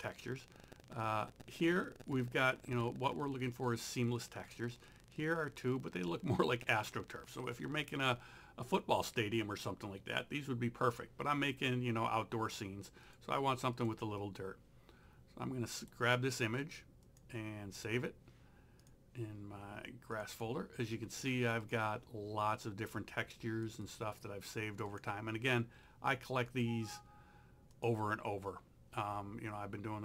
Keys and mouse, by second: 0.1 click, 13.1 click, 15.8 right click, 17.1 click, 18.8 click, 23.7 click, 26.5 click.